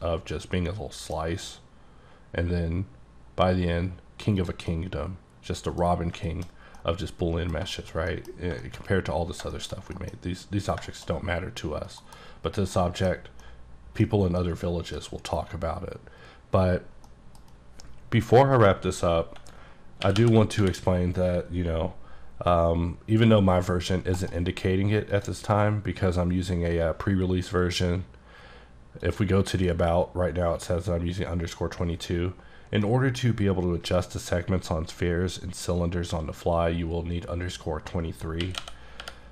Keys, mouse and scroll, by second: 2.9-3.6 scroll up 2, 3.6-4.5 scroll up 8, 4.5 click, 4.8 middle click, 5.9-6.8 scroll down 3, 6.4 shift+middle click, 6.8 scroll up 1, 6.8 middle click, 7.6 scroll down 1, 7.8 middle click, 8.2 double middle click, 8.5 scroll down 2, 8.7 shift+middle click, 9.3 scroll down 2, 9.6 shift+middle click, 11.2-12.1 scroll up 4, 12.1 KP_Decimal, 12.5 scroll up 2, 12.8 middle click, 13.2 scroll down 3, 13.5 middle click, 14.1-14.5 scroll down 1, 14.5 middle click, 17.2 middle click, 20.1-20.7 typing, 24.3 right click, 25.2 click, 27.7 click, 29.1 click, 29.6 click, 32.9 middle click, 38.5-39.1 typing.